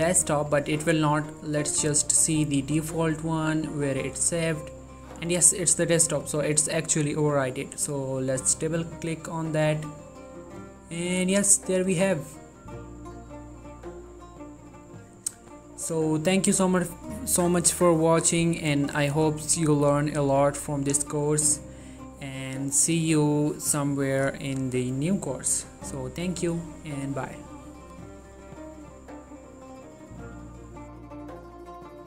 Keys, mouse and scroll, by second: 6.1 click, 12.2 click, 15.2 click, 28.2 click, 31.2 click.